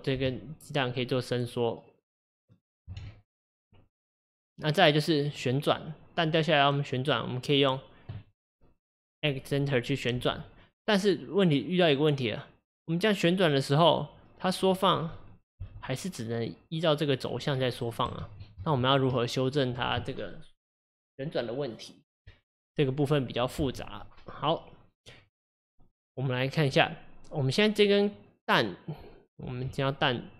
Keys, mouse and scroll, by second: 0.3 g, 3.0 ctrl+z, 3.4 click, 3.9 click, 7.0 click, 10.3 r, 14.6 click, 15.6 g, 18.3 ctrl+z, 18.7 ctrl+z, 25.0 click, 26.5 click, 29.8 Tab.